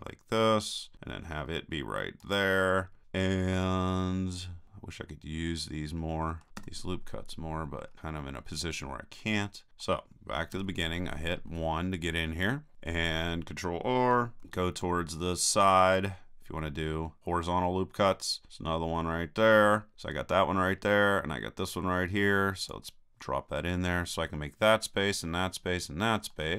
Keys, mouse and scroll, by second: 2.3-3.7 drag, 4.7-6.4 middle drag, 6.6 KP_3, 10.5 KP_1, 12.9-14.2 middle drag, 14.4 ctrl+r, 22.7-24.7 drag, 26.3 middle click.